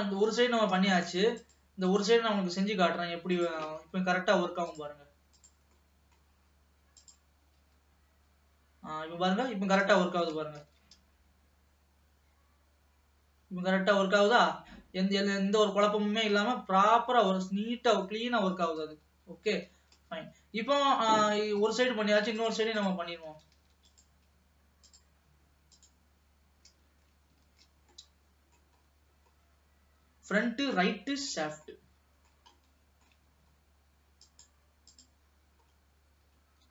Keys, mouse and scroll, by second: 0.8 ctrl+s, 1.7 click, 2.6 middle click, 3.4 click, 4.0-4.9 scroll down 2, 4.9-5.9 drag, 5.9 middle click, 6.4-7.0 scroll up 1, 7.0 click, 7.8 g, 19.7 ctrl+s, 20.2-21.9 middle drag, 21.9-22.6 scroll up 2, 22.6 click, 23.4 ctrl+s, 23.8 alt+a, 24.1 click, 24.9-27.2 drag, 27.2 alt+a, 27.7 ctrl+s, 28.0-29.0 middle drag, 29.0-29.6 scroll up 4, 29.6-30.9 scroll down 1, 30.9-33.5 shift+middle drag, 33.5-34.3 scroll up 2, 34.3 click, 35.1 click, 35.8-36.7 scroll down 2.